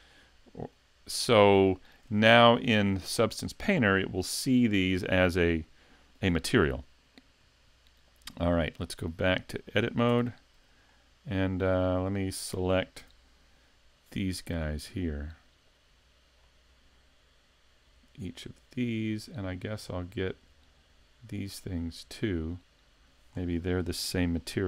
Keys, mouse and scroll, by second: 1.2 middle click, 1.7 shift+middle click, 10.1 Tab, 10.9 middle click, 13.0 a, 14.2 l, 15.9 l, 16.4 scroll up 3, 17.9 l, 18.7 l, 20.3 l, 20.9 l, 22.0 l, 23.0 l, 23.3-23.9 scroll down 3, 24.0-24.4 scroll up 2, 24.4 shift+middle click.